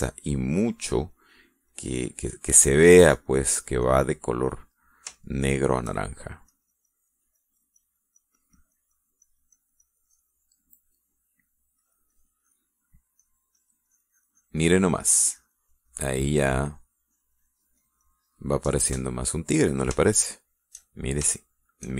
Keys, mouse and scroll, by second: 0.3 click, 1.0 click, 2.0 click, 2.5 click, 3.2-5.0 drag, 5.0 middle click, 5.6 middle click, 6.0 shift+middle click, 7.3 click, 8.2-9.7 drag, 11.5 middle click, 12.6 click, 13.6 middle click, 14.4-17.3 drag, 17.5-18.5 drag, 18.6 click, 19.4 middle click, 20.8-21.9 shift+middle drag.